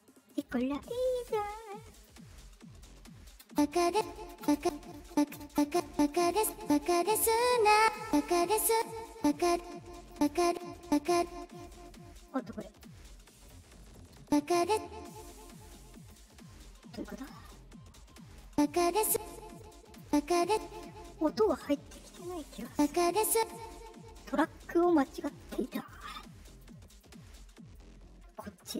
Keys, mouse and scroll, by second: 1.8 click, 3.4-6.5 typing, 4.0 click, 4.8 click, 6.0 click, 7.0 click, 7.7-11.1 typing, 8.2-10.0 drag, 12.2-12.7 drag, 13.2 click, 14.1 space, 14.6 space, 15.9 click, 17.1 click, 18.4 space, 19.0 space, 19.5 click, 19.9 space, 20.4 space, 22.4 click, 22.6 space, 23.3 space, 25.3 click, 26.3 click, 26.8 click, 27.7 click.